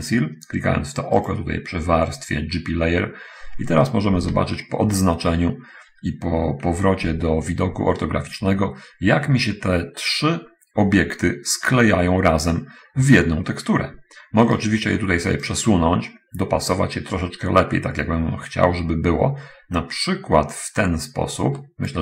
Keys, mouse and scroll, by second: 1.3 click, 4.3 a, 7.3 5, 15.8-22.0 drag.